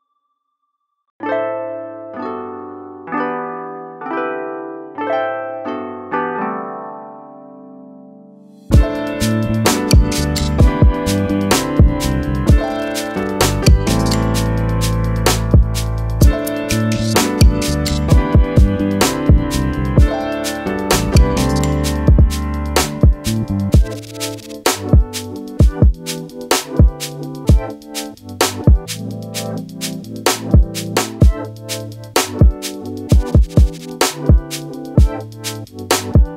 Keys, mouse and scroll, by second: 0.5 BackSpace, 1.3 click, 1.4 BackSpace, 2.2 click, 3.2 Up, 3.8 Left, 4.1 Down, 4.6 click, 5.7 click, 6.2 click, 7.2 click, 14.4-14.7 scroll up 2, 14.9 scroll down 1, 15.1 right click, 15.3 click, 16.0 right click, 16.4 click, 20.2 click, 29.2 Up, 29.8 click, 34.2 click.